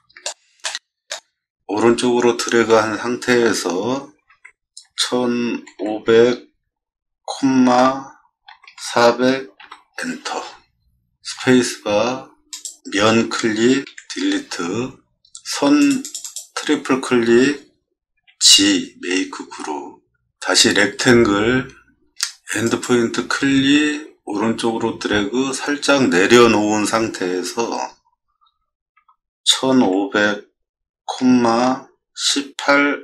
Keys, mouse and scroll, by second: 0.6 middle click, 4.3 1, 4.8 5, 5.5 0, 5.8 0, 7.3-9.4 typing, 9.6 Return, 12.5 click, 16.2 click, 18.1 g, 21.1 r, 28.4 1, 28.9 5, 29.6 0, 29.8 0, 31.2 ,, 32.1 1, 32.6 8.